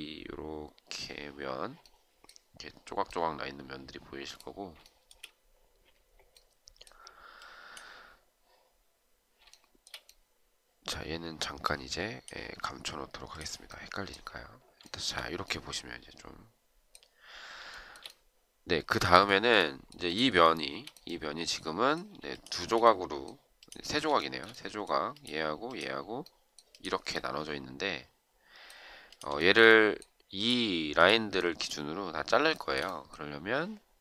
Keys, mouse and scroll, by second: 4.8 shift+right click, 9.4 shift+right click, 14.8 shift+right click, 17.7 shift+right click, 19.2 shift+right click, 20.4 shift+right click, 22.3 shift+click, 24.2 shift+right click, 29.4 shift+right click, 29.6 shift+double right click, 32.5 shift+right click.